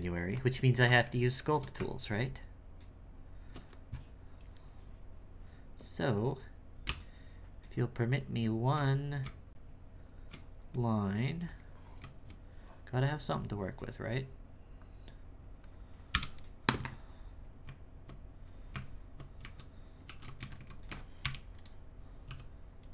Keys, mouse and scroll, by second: 1.0 shift+middle click, 1.7 Tab, 6.8 space, 7.7 space, 11.4 click, 17.5 scroll up 1, 17.6 Tab, 18.7 Tab, 19.4 a, 20.0 s, 22.2 w.